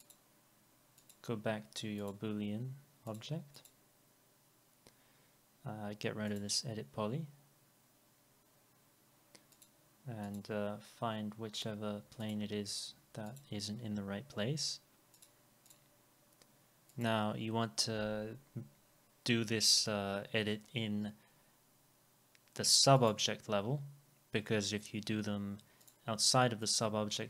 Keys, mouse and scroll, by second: 3.6 double click, 15.7 double click, 19.4 e, 26.7 double click.